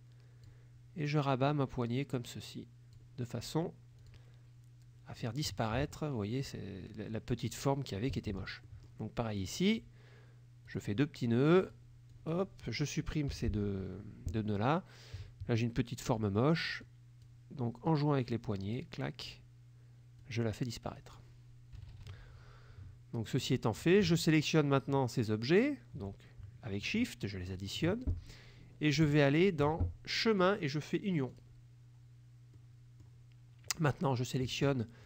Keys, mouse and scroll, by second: 1.5-3.2 drag, 4.1 click, 5.2 middle click, 8.3 middle click, 9.5 click, 10.8 click, 11.6 click, 12.2 click, 13.4 Delete, 16.9 click, 17.9 click, 20.3 click, 21.8 KP_Subtract, 23.4 click, 24.8 shift+click, 29.5 shift+click, 30.5 click, 31.4 click, 32.7 click.